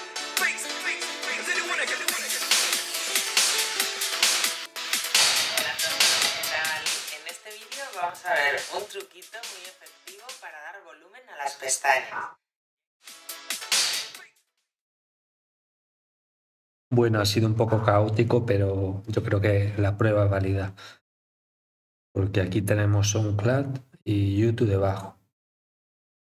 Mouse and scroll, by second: 0.1 click, 4.1 click, 6.2-7.5 drag, 8.0-9.5 drag, 10.1-10.7 drag, 11.1-12.1 drag, 12.8-14.4 drag.